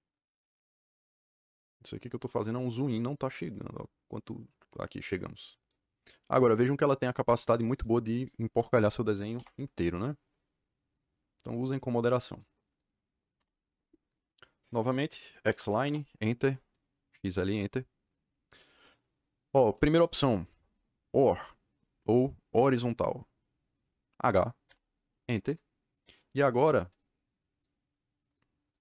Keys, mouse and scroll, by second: 7.7 click, 8.1 click, 8.7-12.3 drag, 9.3 Delete, 12.6 click, 13.3 Delete, 15.2-16.0 typing, 24.6 h, 25.4 KP_Enter, 26.4 click, 26.8 click, 27.4 click, 28.2 click, 28.6 click.